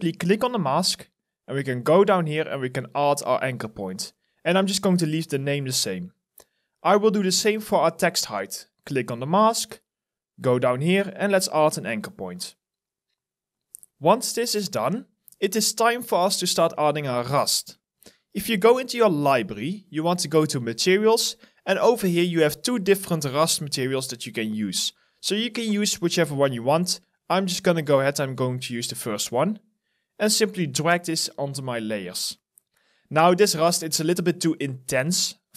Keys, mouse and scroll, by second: 32.0 alt+middle click.